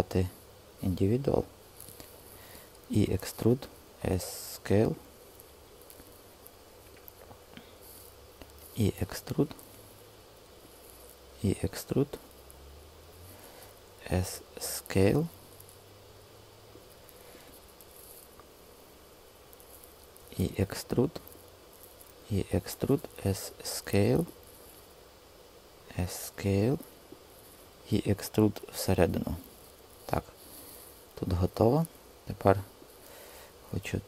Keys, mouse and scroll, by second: 2.7 e, 3.2 Return, 3.6 s, 8.5 e, 11.2 e, 13.0 Escape, 13.9 s, 20.1 e, 22.0 e, 22.8 Return, 22.9 s, 25.6 s, 27.5 e.